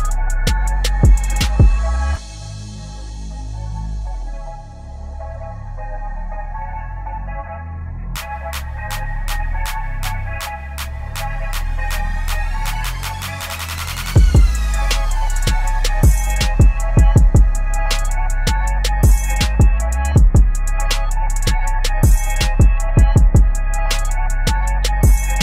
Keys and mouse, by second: 2.3 t, 3.3 click, 3.9 Return, 4.7-6.3 typing, 8.2 click, 8.7 ctrl+a, 11.4 ctrl+=, 12.7 space, 12.7 click, 13.2 space, 15.0 click, 17.4 v, 17.7-21.5 drag, 21.5 ctrl+a, 23.3-25.4 drag.